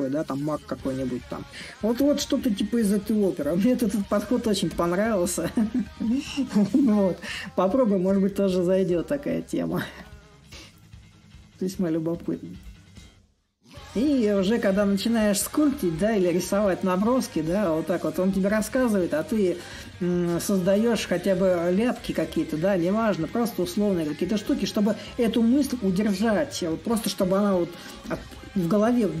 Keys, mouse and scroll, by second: 0.0-5.0 drag, 8.0-13.0 drag, 13.1-18.1 drag, 18.4-23.4 drag, 24.2-29.2 drag.